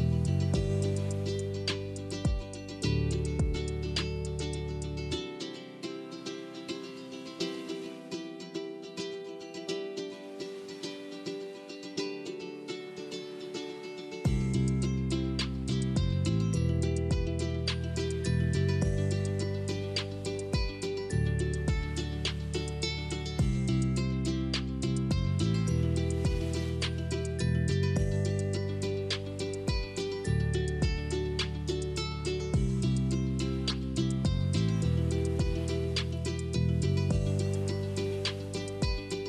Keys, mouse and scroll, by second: 0.0 click, 1.5 click, 3.4 click, 3.8 middle click, 4.9-6.8 middle drag, 6.8 click, 7.2 click, 8.0 shift+click, 8.6 ctrl+c, 8.7 ctrl+v, 9.6 click, 14.0 r, 18.3 click, 19.2 middle click, 20.0 click, 23.8 click, 26.7-29.5 middle drag, 29.5 click, 30.9-32.4 middle drag, 32.4 click, 34.2 click, 34.6-39.2 middle drag.